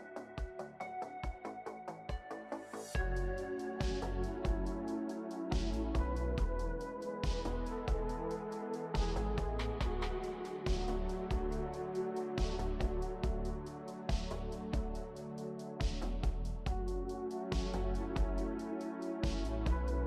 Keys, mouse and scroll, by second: 6.7 ctrl+d, 13.5 ctrl+shift+n.